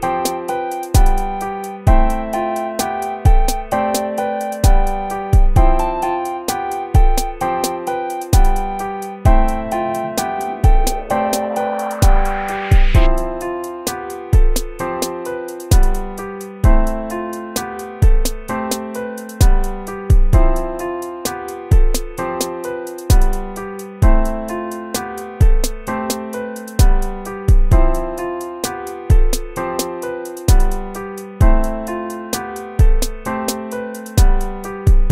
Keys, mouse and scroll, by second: 0.5-2.0 typing, 3.2-7.4 typing, 5.8 ctrl++, 6.3 ctrl+z, 7.7 ctrl+-, 9.0-17.9 typing, 19.5-28.2 typing, 24.9 ctrl+-, 25.2 ctrl++, 29.9 BackSpace, 31.2 ctrl+-, 34.9 BackSpace.